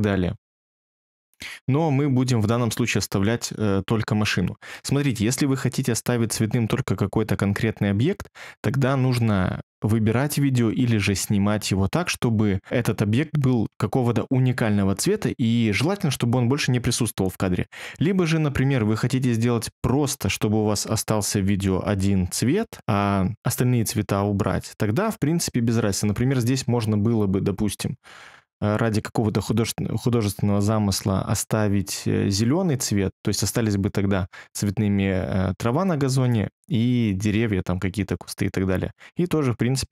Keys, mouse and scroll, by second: 2.7-4.3 scroll, 4.3 scroll.